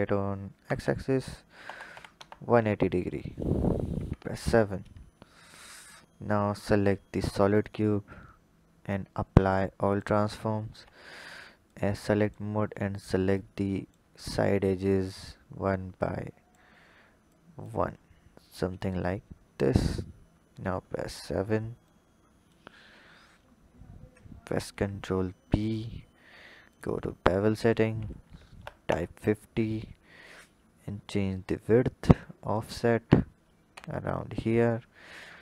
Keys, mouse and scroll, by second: 3.9 KP_7, 4.6-5.7 scroll down 2, 5.7 click, 7.6-10.6 drag, 10.7 Tab, 11.6 click, 12.2 click, 12.9 click, 13.3 click, 14.6 shift+click, 16.0 shift+click, 17.3 shift+click, 18.5 click, 20.3 KP_7, 21.9-22.9 drag, 22.9-24.5 scroll up 8, 24.5 ctrl+b, 26.7-29.2 drag, 30.2-33.3 shift+drag, 33.7 Tab, 34.2-35.4 scroll down 2.